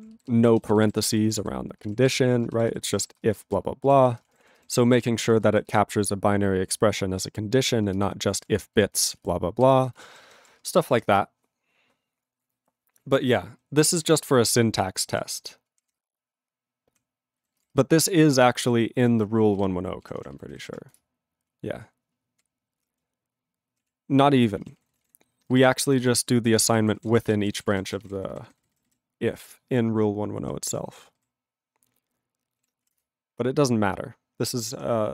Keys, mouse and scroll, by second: 0.1 ctrl+b, 0.4 ctrl+p, 0.6 ctrl+b, 1.8 ctrl+space, 1.9 ctrl+e, 2.1 ctrl+g, 2.7 alt+b, 3.3 ctrl+space, 3.6 ctrl+alt+f, 3.9 ctrl+g, 4.2 ctrl+space, 4.3 ctrl+e, 4.3 ctrl+n, 4.4 ctrl+e, 4.6 ctrl+g, 4.9 ctrl+p, 5.0 ctrl+e, 5.2 ctrl+space, 5.7 ctrl+alt+b, 7.6 ctrl+g, 7.8 ctrl+space, 8.4 ctrl+alt+f, 8.8 ctrl+g, 9.0 ctrl+f, 9.1 ctrl+space, 9.2 ctrl+e, 9.6 ctrl+g, 10.1 alt+b, 10.7 ctrl+space, 10.8 ctrl+n, 10.9 ctrl+e, 10.9 ctrl+g, 14.0 ctrl+p, 14.1 ctrl+space, 14.2 ctrl+n, 14.9 ctrl+n, 15.7 ctrl+p, 15.8 ctrl+g, 15.9 ctrl+space, 15.9 ctrl+p, 16.5 ctrl+p, 17.4 ctrl+n, 17.6 ctrl+g, 17.6 ctrl+space, 17.8 ctrl+n, 18.3 ctrl+n, 19.1 ctrl+g, 20.0 ctrl+g, 21.0 Return, 21.5-22.4 ctrl+p, 22.8 ctrl+l, 23.1-23.8 ctrl+p, 23.8 ctrl+e, 24.2 ctrl+a, 24.3 ctrl+p, 24.5 ctrl+space, 24.6 ctrl+e, 24.6 ctrl+n, 24.8 ctrl+e, 24.9 ctrl+n, 25.0 ctrl+e, 25.1 ctrl+g, 25.7 alt+b, 26.0 alt+b, 26.6 ctrl+e, 26.7 ctrl+g, 26.8 ctrl+n, 27.1 ctrl+space, 27.2 ctrl+e, 27.2 ctrl+g, 27.4 ctrl+n, 27.5 ctrl+a, 27.6 ctrl+n, 27.6 ctrl+space, 27.7 ctrl+e, 27.7 ctrl+n, 27.9 ctrl+n, 28.0 ctrl+e, 28.0 ctrl+g, 28.2 ctrl+n, 28.5 ctrl+n, 28.6 ctrl+n, 28.9 ctrl+n, 29.5-30.4 ctrl+p, 30.9 ctrl+a, 31.0 ctrl+n, 31.2 ctrl+n, 33.0 Return, 34.4 ctrl+p.